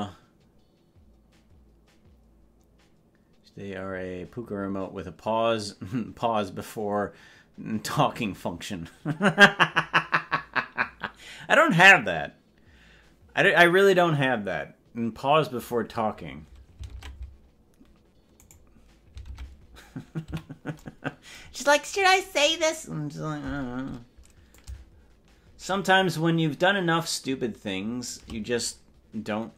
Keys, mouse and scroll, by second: 17.0 ctrl+Tab, 18.8 right click, 19.4 ctrl+Tab, 20.4 a, 22.2-22.8 scroll down 10, 24.6-28.2 shift+drag.